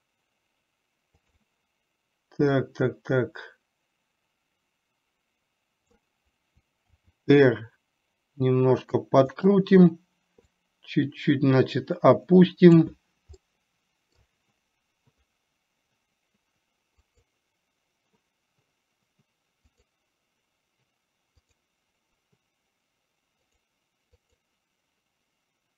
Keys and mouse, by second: 3.0-6.1 drag, 7.2 r, 10.6-13.0 drag, 13.5 middle click, 17.1 click, 19.8 click, 21.5 click, 24.5 click.